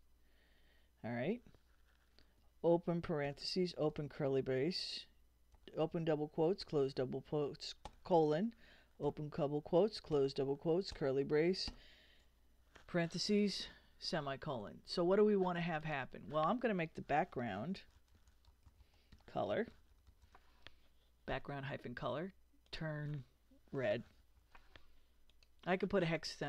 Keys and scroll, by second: 3.3 shift+9, 3.9 shift+[, 5.5 shift+', 7.9 shift+;, 9.0 shift+', 10.9 shift+], 11.7 shift+0, 13.4 ;, 16.8-20.7 typing, 23.7-24.9 typing.